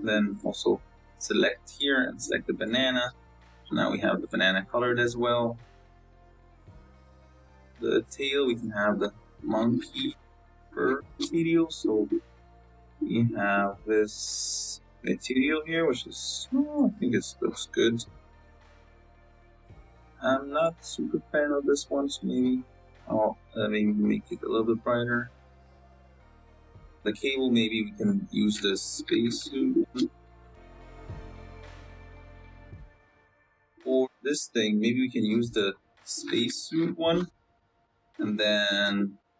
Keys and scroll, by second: 4.0 z, 32.6 z, 37.3 c, 37.7 BackSpace.